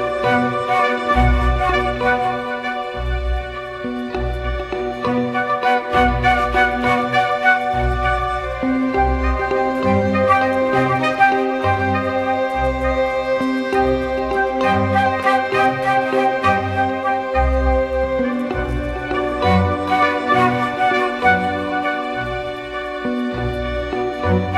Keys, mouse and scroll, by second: 22.7 ctrl+t.